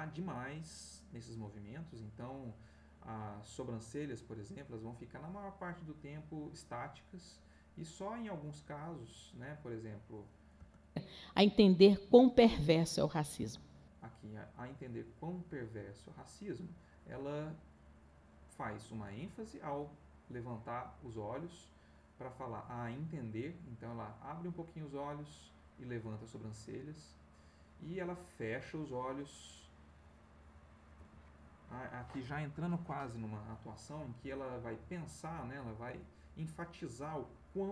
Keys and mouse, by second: 0.8-10.4 drag, 10.5 space, 13.3 space, 14.6-31.3 drag, 35.1-37.7 drag.